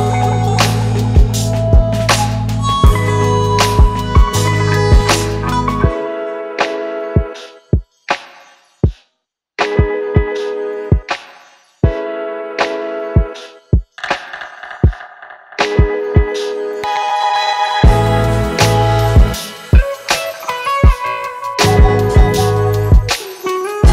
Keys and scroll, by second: 12.3-15.6 typing, 16.9 Return.